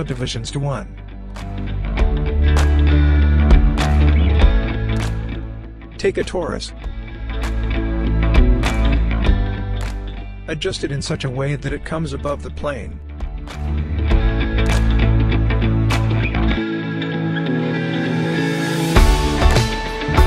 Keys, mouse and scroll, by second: 0.0-1.2 scroll up 1, 6.8 click, 7.6 scroll up 1, 8.9 space, 10.3-10.7 scroll up 1, 11.5 w, 12.2-14.3 drag, 18.4 click.